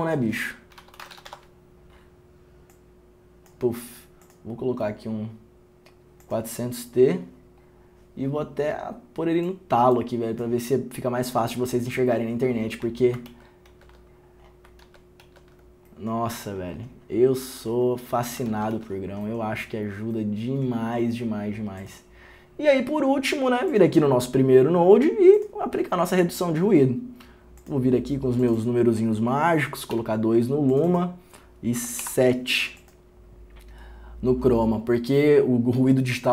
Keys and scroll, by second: 1.2 r, 1.5 n, 18.9 ctrl+d.